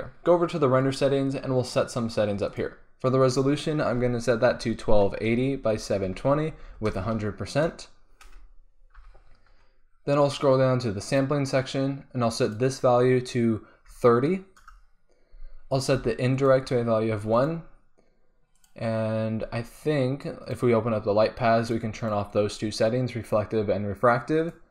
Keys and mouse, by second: 0.8-7.0 drag, 7.0 KP_0, 11.0-14.5 drag, 16.3-24.7 drag.